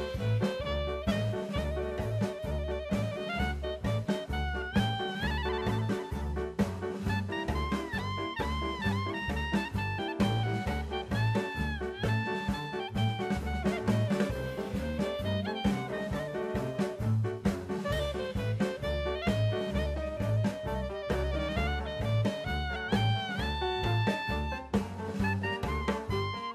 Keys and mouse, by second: 2.9-3.3 middle drag, 4.4 shift+a, 6.2-7.1 drag, 7.4 s, 8.5 middle click, 9.4-10.5 drag, 10.6-11.0 middle drag, 11.1 Tab, 11.5 middle click, 12.2 ctrl+r, 16.1 click, 17.7 ctrl+b, 19.2 click, 20.5 3, 22.0 click, 23.6 shift+click, 24.0 shift+click, 24.5 shift+click, 25.0 shift+click, 25.5 shift+click, 25.9 shift+click, 26.3 shift+click.